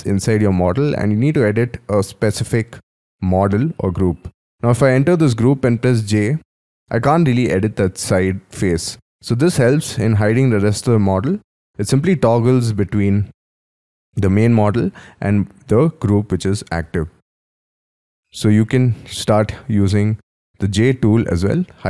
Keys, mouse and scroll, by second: 0.2-0.9 scroll down 4, 0.9-4.4 scroll up 7, 5.0 double click, 5.3-5.7 scroll down 3, 5.7-6.1 scroll up 3, 6.1 j, 6.6-9.5 scroll up 1, 9.5 j, 10.5-11.3 scroll down 3, 11.3-12.9 typing, 14.2-14.7 scroll down 4, 14.7-16.4 scroll up 4, 16.7 j, 17.6-18.5 scroll down 11, 18.5-19.0 scroll up 3, 19.2-20.6 scroll down 12, 20.6 scroll up 5.